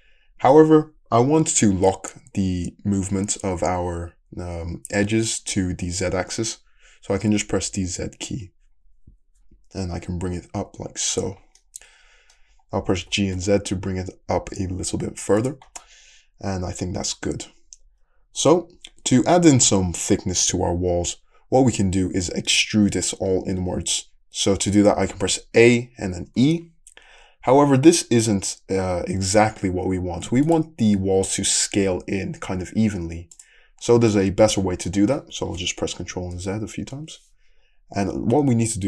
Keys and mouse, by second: 1.5-11.2 drag, 11.2-27.3 middle drag, 13.0 g, 25.6 a, 26.4 e, 31.8 s, 36.0 ctrl+z, 36.3 ctrl+z.